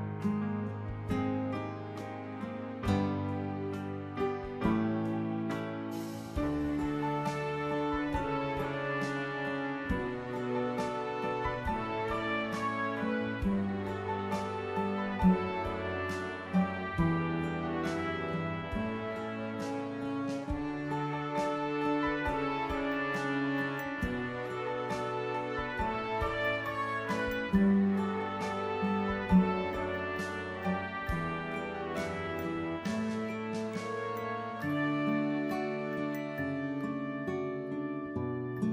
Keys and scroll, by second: 0.0 ctrl+-, 18.2 ctrl+-.